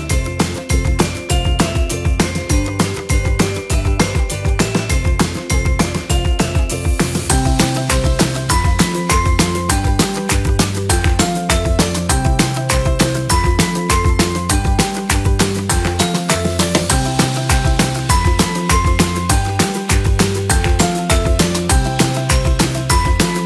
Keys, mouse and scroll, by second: 0.8 alt+scroll down 1, 1.2 alt+click, 1.8 alt+click, 2.4-3.1 alt+scroll down 2, 3.1 alt+scroll up 1, 4.0 alt+click, 6.4 alt+scroll down 1, 7.0 alt+scroll up 1, 10.5 ctrl+j, 12.8-13.8 scroll down 1, 14.9 scroll down 1, 19.0 ctrl+a, 19.9 ctrl+c, 22.1 ctrl+v.